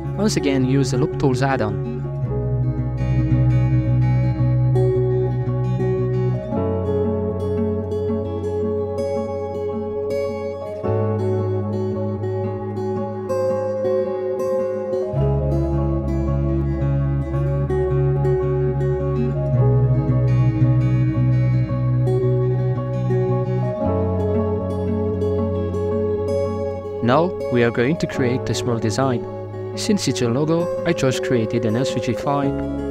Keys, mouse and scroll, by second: 0.0 w, 1.0-1.7 middle drag, 1.7 s, 4.4-5.5 middle drag, 5.5 shift+right click, 5.8-6.9 middle drag, 6.9 shift+right click, 7.3 middle click, 7.7 alt+z, 8.0 middle click, 8.4 ctrl+b, 10.2 Tab, 10.6 alt+right click, 11.5-12.7 middle drag, 12.7 alt+shift+right click, 13.1 middle click, 14.5 w, 15.0-17.1 middle drag, 17.1 click, 17.6-21.0 drag, 21.0 s, 23.1 Tab, 23.5 scroll down 4, 23.7-24.6 middle drag, 24.6-25.0 scroll down 5, 25.0-26.6 middle drag, 28.1 Return, 30.3 click, 30.5 middle click, 30.5 scroll up 4, 30.6 shift+middle drag, 30.7 right click, 30.9 g, 31.1 right click, 31.1 right click, 31.3 g, 32.1 middle click, 32.1-32.7 scroll up 3, 32.3 shift+middle click, 32.7 right drag.